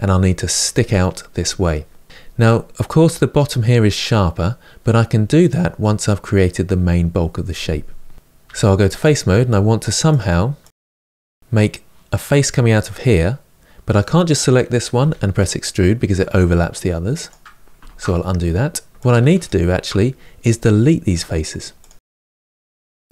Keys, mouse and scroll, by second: 1.9-8.2 middle drag, 8.2 3, 8.8 click, 10.4 shift+click, 10.8-13.8 middle drag, 13.8 click, 14.7 e, 17.6 ctrl+z, 18.9 shift+click, 19.2 shift+click, 21.6 Delete, 21.9-22.4 middle drag, 22.4-22.8 scroll up 2, 22.8-23.1 shift+middle drag.